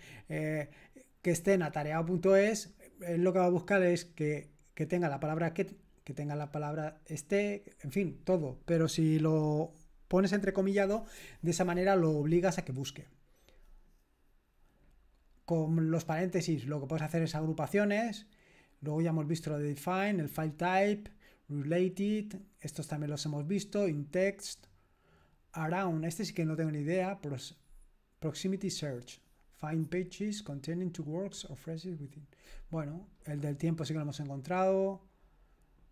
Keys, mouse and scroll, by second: 13.0-14.1 scroll down 1, 14.1-16.8 scroll down 1, 16.8-18.8 scroll down 1, 18.8-20.1 scroll down 1, 20.1-21.1 scroll down 1, 21.1-22.4 scroll down 1, 22.4-23.5 scroll down 1, 23.5-24.4 scroll down 1, 24.4-32.8 scroll down 1, 32.8-35.9 scroll down 1.